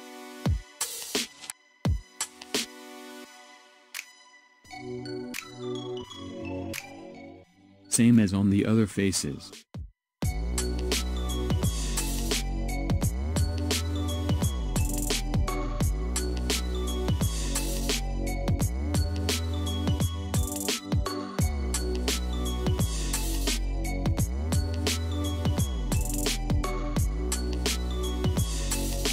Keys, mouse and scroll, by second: 1.7 click, 2.5-3.4 scroll down 4, 3.4-4.5 scroll up 2, 4.5-6.8 middle drag, 6.8 click, 8.2 x, 10.2 click, 11.2-13.2 middle drag, 13.2 click, 15.3 alt+shift+s, 17.7-20.7 middle drag, 21.7-23.2 middle drag, 23.2 click, 24.3 x, 25.4 click, 25.8 click, 27.6 shift+click, 28.0 shift+click, 28.4 shift+click, 28.8 shift+click.